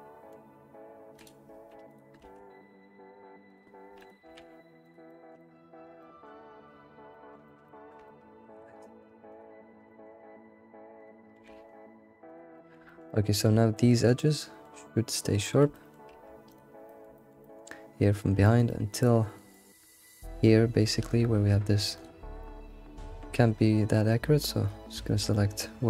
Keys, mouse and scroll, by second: 1.2 click, 1.5 click, 1.9 ctrl+click, 2.2 alt+s, 4.1 click, 4.3 alt+s, 5.1-8.4 shift+middle drag, 8.4 scroll up 1, 8.5 middle click, 9.4 click, 9.9-11.0 middle drag, 11.0 ctrl+click, 11.4 alt+s, 12.5-13.9 middle drag, 14.2 alt+s, 14.2-16.5 middle drag, 16.5 ctrl+click, 16.7 scroll down 1, 16.8 middle click, 17.3-20.5 middle drag, 20.6-21.4 scroll up 2, 21.4-22.0 scroll up 1, 22.0 ctrl+click, 22.4-25.1 middle drag, 25.1 scroll down 2, 25.3-25.8 middle drag.